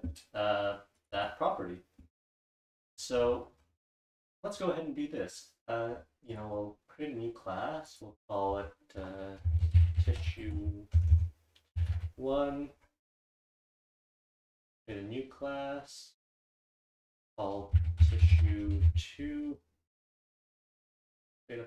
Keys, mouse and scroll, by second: 0.6-1.9 scroll down 1, 1.0 click, 1.1 click, 1.9 scroll down 1, 2.0-3.2 scroll up 1, 2.8 click, 3.0 click, 3.2-4.0 scroll down 1, 4.0 click, 4.0-4.6 scroll down 1, 4.6-5.3 scroll down 1, 5.3-5.9 scroll down 1, 5.9-7.3 scroll down 1, 6.3 click, 6.4 right click, 7.3-7.9 scroll down 1, 7.9 scroll down 1, 14.7 click, 14.8 right click, 20.7 click, 20.8 right click.